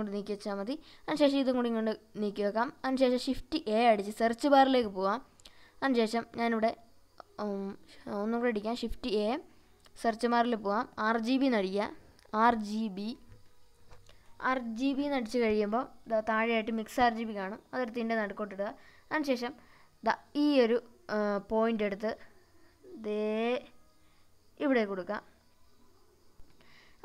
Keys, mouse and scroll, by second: 0.8-2.8 drag, 3.6 shift+a, 6.1 click, 9.1 shift+a, 21.9-25.0 drag.